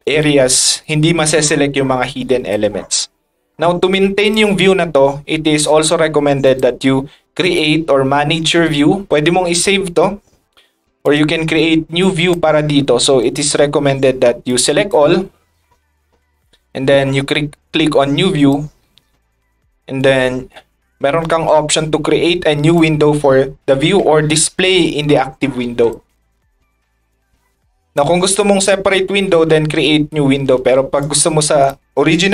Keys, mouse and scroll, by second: 0.0 click, 0.8-2.5 drag, 3.9-4.3 drag, 6.4 click, 7.4 click, 11.0 click, 11.7 middle drag, 12.0 scroll up 2, 14.5 click, 20.0 click, 21.4 ctrl+click, 24.7 ctrl+click, 25.9 click, 27.9 ctrl+click.